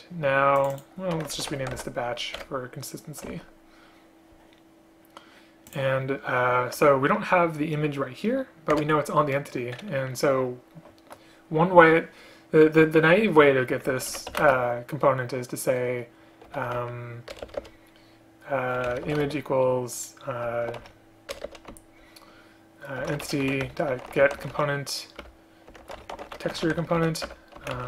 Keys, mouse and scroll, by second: 2.5 Return, 3.4 ctrl+z, 8.8 Return, 14.5 space, 17.4 BackSpace, 17.5 BackSpace, 17.7 BackSpace, 19.1 space, 19.3 space, 21.4 BackSpace, 21.5 BackSpace, 25.3 Return, 27.3 Return.